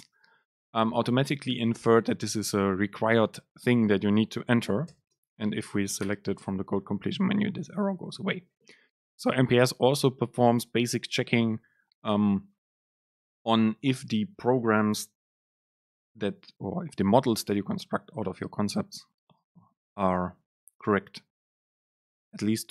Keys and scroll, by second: 5.1 super+space.